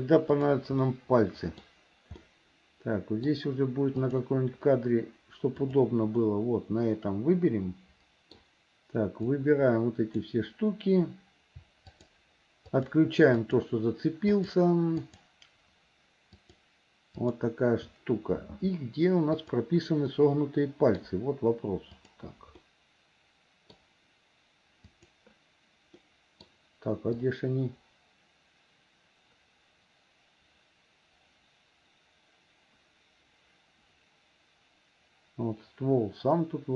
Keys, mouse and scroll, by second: 0.4 click, 0.8 middle click, 2.3-3.3 middle drag, 4.1 click, 5.7 click, 6.2-8.4 middle drag, 9.3-10.3 drag, 11.9 shift+click, 12.8 shift+click, 13.4 shift+click, 14.3 shift+click, 16.3 shift+click, 17.2 shift+click, 19.4 click, 20.2 middle click, 22.1 click, 22.6-23.8 middle drag, 25.0 click, 26.0 middle click, 27.3-36.7 drag.